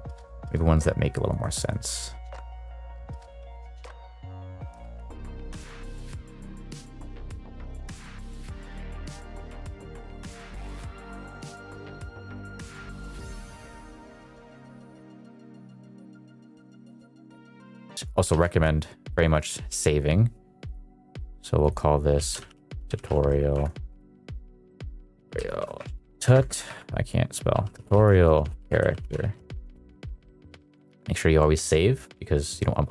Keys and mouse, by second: 0.0 click, 0.5 click, 1.3 drag, 1.7 click, 2.3 click, 2.6 click, 3.5 click, 3.8 click, 4.4 middle drag, 5.0 shift+middle click, 5.5 middle click, 6.9 middle click, 7.3 middle click, 8.0 middle click, 8.4 shift+middle click, 9.6 middle click, 10.3 middle click, 10.4 click, 10.5 middle click, 10.8 click, 10.8 q, 11.1 click, 11.8 click, 12.1 q, 12.3 shift+middle click, 12.3 click, 12.5 drag, 12.6 click, 12.6 click, 12.7 shift+click, 12.8 q, 12.9 click, 12.9 shift+click, 12.9 q, 13.2 q, 13.3 click, 13.6 click, 14.1 click, 14.2 click, 14.6 click, 14.7 shift+middle click, 14.8 click, 15.0 click, 15.5 click, 15.7 middle click, 15.9 shift+click, 16.0 shift+q, 16.1 shift+click, 16.2 click, 16.5 shift+q, 16.7 click, 16.7 click, 16.9 middle click, 17.1 click, 17.1 click, 17.2 shift+middle click, 17.3 q, 17.5 click, 17.7 middle click, 17.9 middle click, 18.3 ctrl+s, 31.5 shift+middle drag.